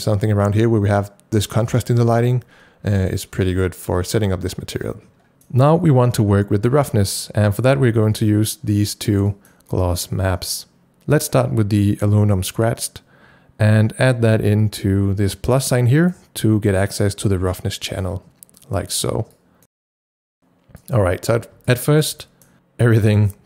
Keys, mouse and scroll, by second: 5.3 click, 5.3-7.6 scroll down 1, 8.2 click, 8.6 scroll up 1, 9.3 click, 14.4-21.7 drag, 14.5 scroll up 1, 21.7 shift+click, 22.2 shift+click.